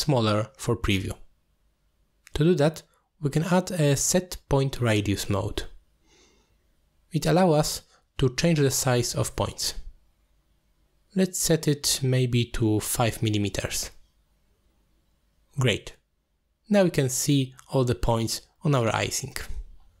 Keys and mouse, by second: 0.3 click, 1.4 click, 2.9-7.1 drag, 7.8 alt+shift+click, 9.5-14.4 drag, 11.3 0, 15.2-17.5 drag, 16.1 m, 18.5-18.8 middle drag.